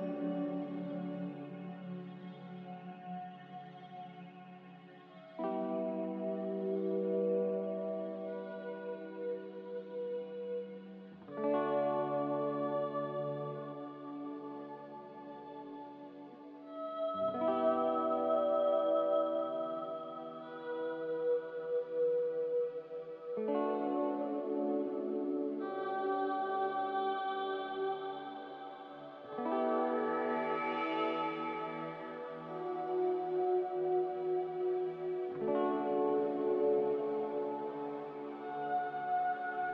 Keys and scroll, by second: 0.1 a, 1.4 ctrl+c, 4.4 n, 9.8 a, 22.5 g, 27.2 typing, 32.6 a, 34.5 g, 35.8-36.2 typing, 38.2 a, 39.4 ctrl+c.